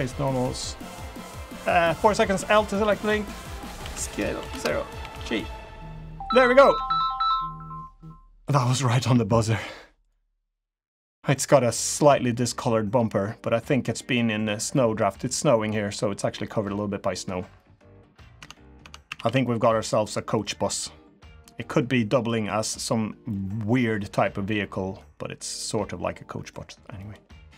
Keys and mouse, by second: 2.3 l, 2.9 g, 3.8 s, 5.0 g, 6.6 Tab, 10.0 click, 10.4-10.8 middle drag, 11.3-11.6 middle drag, 11.9 middle drag, 14.1 middle drag, 14.7 middle drag, 15.7 middle drag, 16.4-17.1 middle drag, 17.6 middle drag, 18.4 Tab, 19.0 Tab, 19.0 a, 19.2 a, 19.4-20.1 middle drag, 20.3-22.2 middle drag, 22.4 middle drag, 23.3-23.8 middle drag, 24.4-24.8 middle drag, 24.8 click, 25.1 drag, 25.4-26.5 middle drag, 27.0 click.